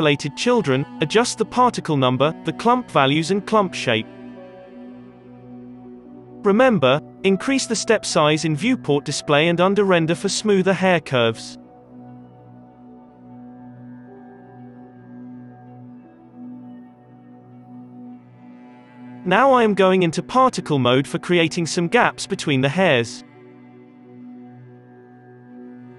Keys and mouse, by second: 18.9 Tab, 19.8-22.0 drag, 19.8 f, 22.0-25.3 middle drag, 22.0 b, 22.5 ctrl+l, 24.4 g.